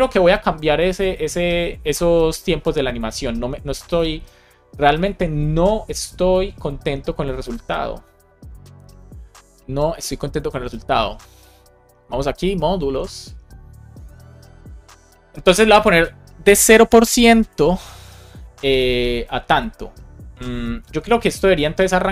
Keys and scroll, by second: 17.4 shift+5, 18.4 Down, 20.4 Up, 21.5 Left.